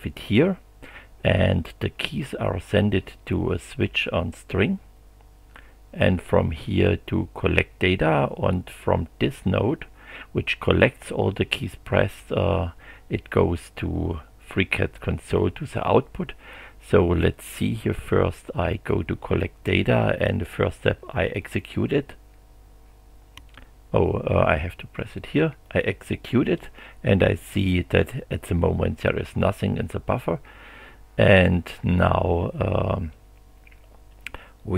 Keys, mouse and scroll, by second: 18.7 click, 21.4 click, 25.6 click.